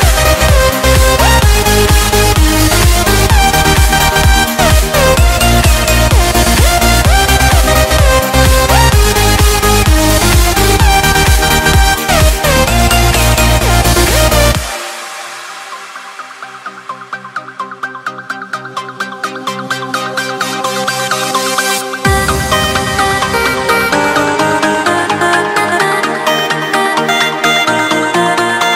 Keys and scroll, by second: 1.9 Return, 6.2 Escape, 9.3 alt+7, 10.7 alt+a, 11.0 Escape, 15.1 ctrl+b, 21.5 Return, 24.4 Escape, 25.0 Escape, 28.6 alt+a.